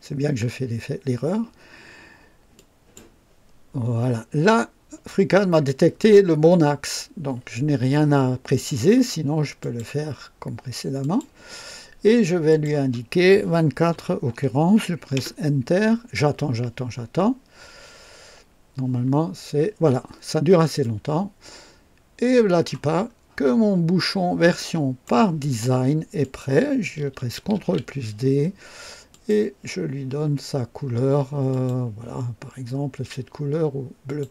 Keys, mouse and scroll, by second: 2.5 click, 9.6 click, 11.0 click, 12.4 click, 13.9 KP_4, 13.9 KP_4, 15.1 Return, 15.1 Return, 20.8-22.8 drag, 23.0 scroll up 1, 23.5-24.0 scroll down 2, 24.5-25.2 right drag, 26.1 click, 27.5 ctrl+d, 29.0 click, 31.5 click, 34.0 click.